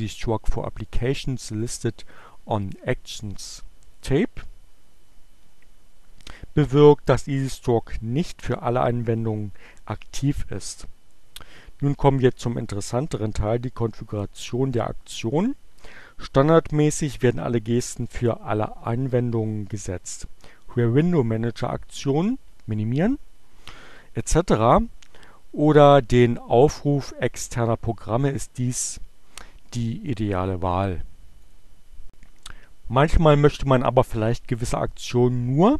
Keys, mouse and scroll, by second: 31.1 click.